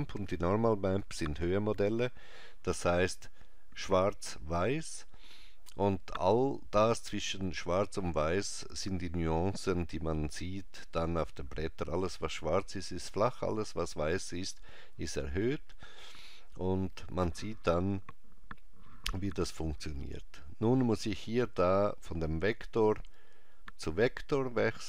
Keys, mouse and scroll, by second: 21.6 click.